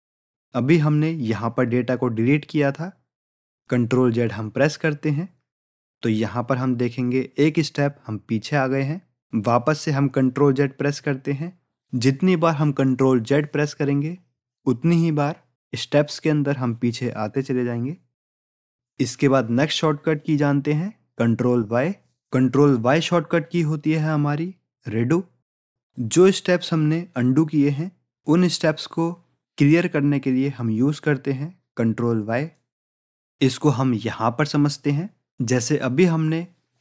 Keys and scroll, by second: 5.3 ctrl+z, 8.9 ctrl+z, 10.4 ctrl+z, 12.9 ctrl+z.